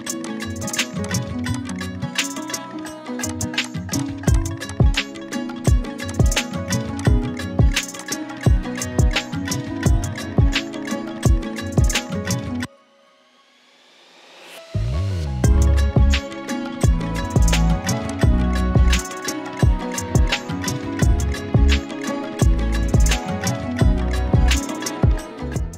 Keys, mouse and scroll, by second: 2.9-4.8 typing, 3.3 click, 3.6 click, 3.9 click, 4.3 click, 4.7 click, 4.9 click, 13.3 click, 18.1 click, 19.6-22.2 typing, 22.6 Return.